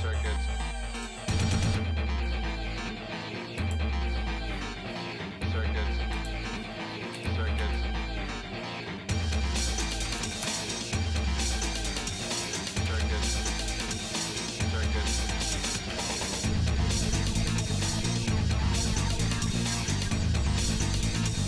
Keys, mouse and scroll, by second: 3.6-6.5 drag, 7.1 r, 11.8 shift+middle click, 12.9 KP_1, 13.9 middle click, 14.7 scroll up 1, 15.5 g, 20.0-20.6 scroll up 5, 20.7 scroll down 1, 21.3 scroll down 1, 21.4 scroll up 1.